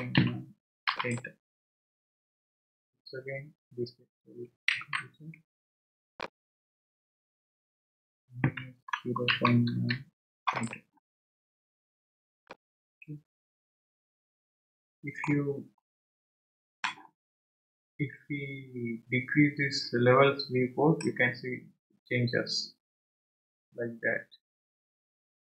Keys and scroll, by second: 0.0-0.6 typing, 0.9 Return, 4.7 ctrl+z, 8.2-10.2 typing, 10.5 Return.